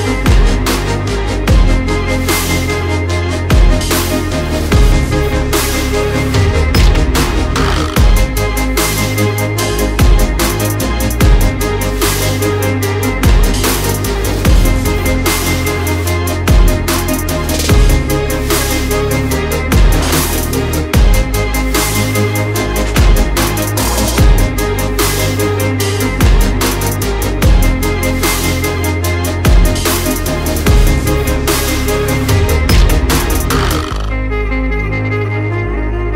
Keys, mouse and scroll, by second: 0.6 click, 2.2 shift+click, 6.5 click, 6.7 alt+scroll up 1, 7.4 click, 7.6 double click, 8.1 click, 11.9 ctrl+z, 12.3 click, 16.2 click, 18.7 click, 21.5-23.1 typing, 24.0 click, 26.0 6, 26.7 click, 34.4 click.